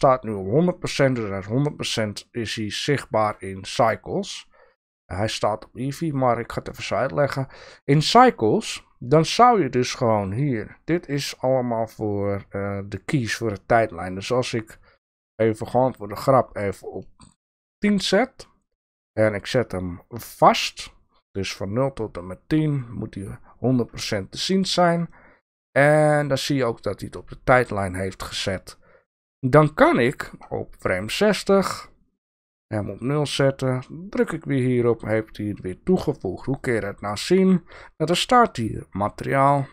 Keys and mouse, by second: 2.8 click, 6.6 click, 15.4 click, 15.5 middle click, 15.6 drag, 15.7 middle click, 15.8-17.7 drag, 20.3 click, 25.6-26.2 drag, 28.4-30.8 drag, 32.3 click, 34.1 click, 36.5 click, 36.8 click.